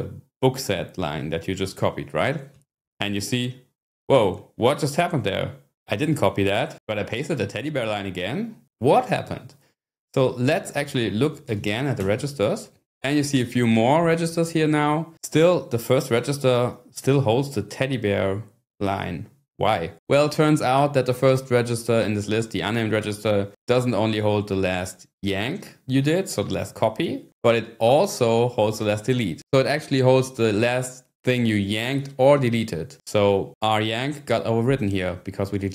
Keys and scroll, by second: 2.5 p, 10.8-12.0 typing, 12.3 Return.